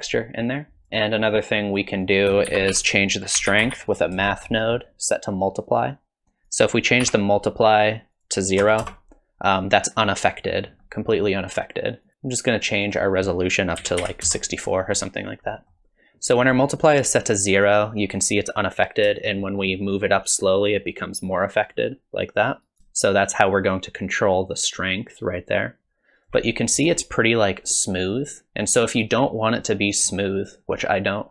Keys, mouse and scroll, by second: 0.9 scroll up 2, 1.0 click, 2.0 click, 2.5 shift+a, 6.5 click, 8.1 click, 10.8 middle click, 12.0 click, 12.8 click, 15.5 middle click, 19.3 shift+click, 23.1 shift+click, 26.7-27.1 scroll up 5, 30.0-30.8 scroll down 4, 30.8 scroll down 1.